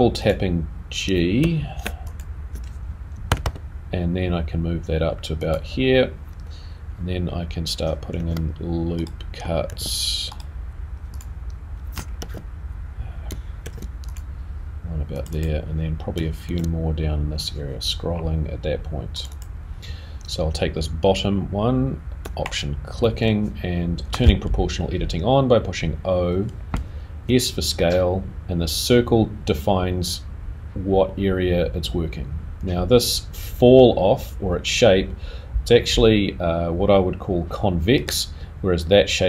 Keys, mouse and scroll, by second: 0.2 click, 2.1 alt+click, 5.1 g, 11.1 click, 11.1 r, 12.2 r, 13.6 ctrl+r, 15.3 click, 16.4 ctrl+r, 22.4 alt+click.